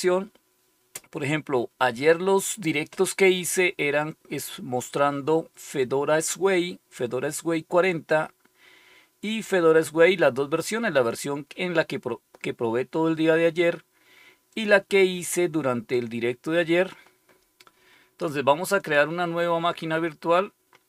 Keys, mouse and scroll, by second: 10.8 click, 14.4 click, 14.8 click, 18.7 click.